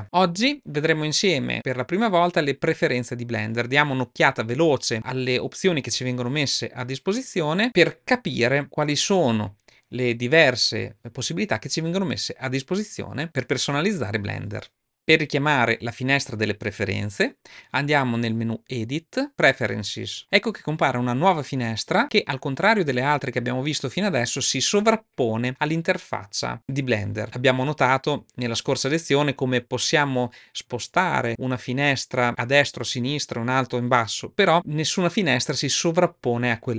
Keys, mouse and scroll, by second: 19.2 click.